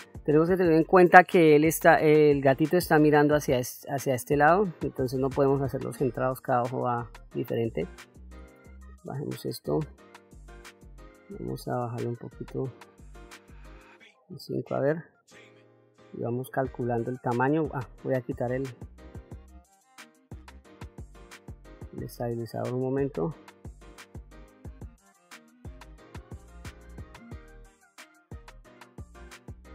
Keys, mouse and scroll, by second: 5.7 middle click, 6.7 middle click, 8.3 f, 10.6 f, 16.1 click, 18.3-21.2 drag, 21.8-25.2 drag, 26.7 shift+f, 26.8 click, 27.5 ctrl+middle click, 27.8 click, 28.7-29.7 drag.